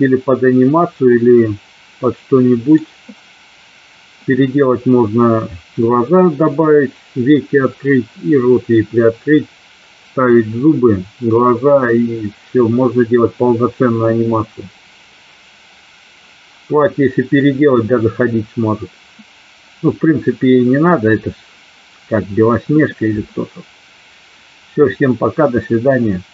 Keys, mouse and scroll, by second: 1.3-2.8 middle drag.